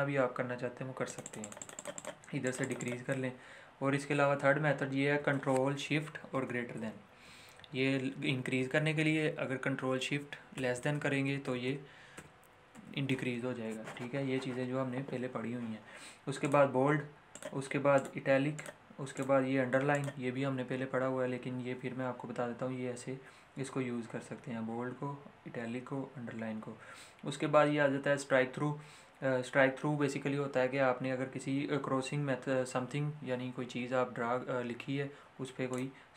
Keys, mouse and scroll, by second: 6.3 ., 16.3 click, 35.7 click, 35.8 click.